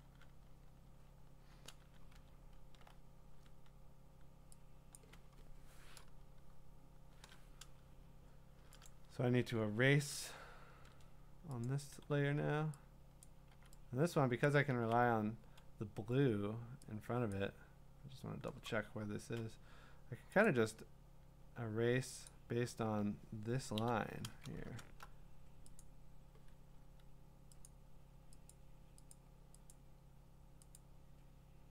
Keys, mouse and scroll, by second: 0.4 click, 0.4 scroll, 2.3-3.8 scroll, 4.9 click, 8.9 click, 10.7 ctrl+d, 11.6 click, 13.2 click, 13.5 x, 14.4 click, 14.7 ctrl+z, 17.3 click, 18.9 scroll, 20.4 click, 22.0 middle click, 22.3 click, 23.8 i, 24.5 ctrl+middle click, 24.6 middle click, 24.6 middle click, 24.6 middle click, 24.8 scroll, 25.8 click, 26.8 Escape, 27.7 click, 28.5 click, 29.1 click, 29.7 click, 30.7 click.